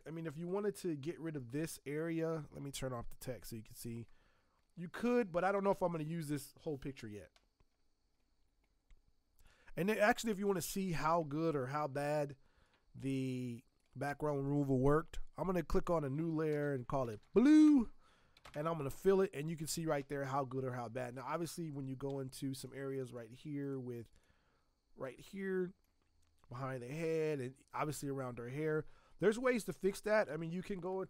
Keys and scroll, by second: 1.3 space, 12.0 i, 16.5 ctrl+shift+n, 16.8-17.9 typing, 18.4 alt+BackSpace, 22.1 z, 25.0 space, 26.7 space, 30.6 ctrl+alt+r.